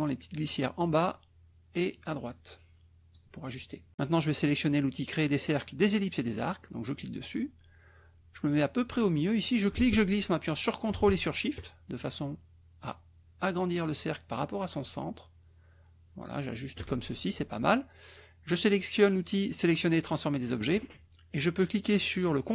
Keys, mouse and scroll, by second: 0.0 click, 1.9-3.3 drag, 6.9 click, 9.6-16.5 ctrl+drag, 20.1 click.